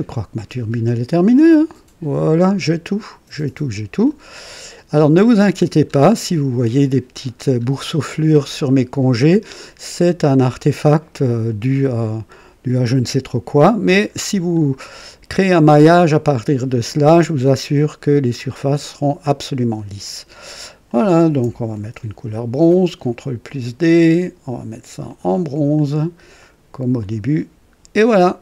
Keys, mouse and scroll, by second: 4.4 right click, 5.8-6.5 scroll up 2, 7.6-8.0 scroll down 1, 8.0-9.9 drag, 10.4 right click, 10.8-14.2 drag, 14.7 scroll down 2, 15.2-18.3 right drag, 20.8 click, 21.7 ctrl+d, 23.4 click, 25.0 click, 25.7 click, 26.3 click, 27.0 click, 27.4 scroll down 1, 28.0 click.